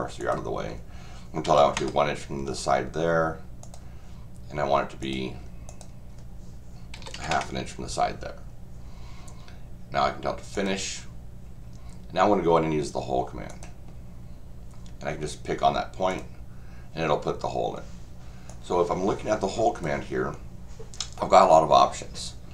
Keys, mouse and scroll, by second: 0.2 click, 3.6 click, 5.0 click, 5.7 click, 10.5 click, 13.5 click, 16.1 click, 18.5-19.8 drag.